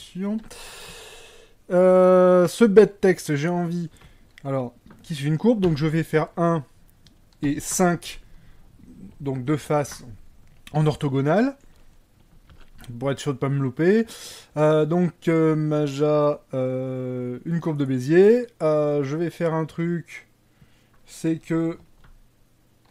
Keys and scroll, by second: 4.9 1, 4.9 5.